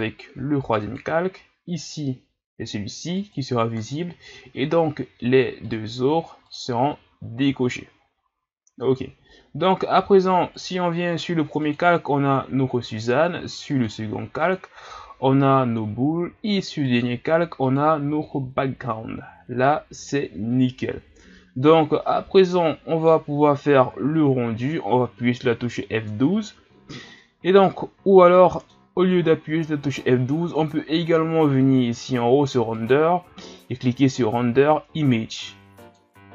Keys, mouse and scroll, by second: 3.1 click, 5.8 click, 10.5-13.5 drag, 13.7-16.8 drag, 16.8-19.4 drag, 19.4-21.7 scroll down 1, 21.7-22.1 scroll down 1, 22.1-25.3 middle drag, 27.1-27.6 scroll down 2, 27.6-29.0 middle drag, 29.0-32.0 scroll up 1, 32.7-35.9 drag.